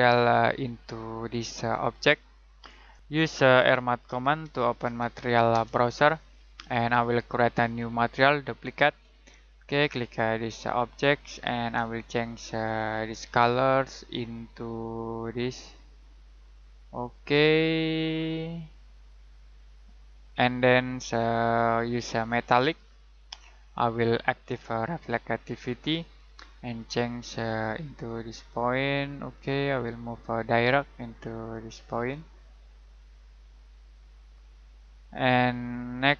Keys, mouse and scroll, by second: 1.5 middle click, 3.5-5.5 typing, 7.0 right click, 8.4 click.